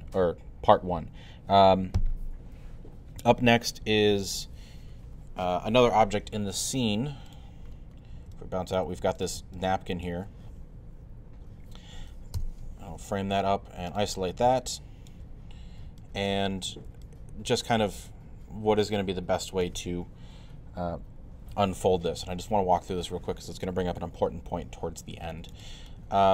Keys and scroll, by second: 12.4 f.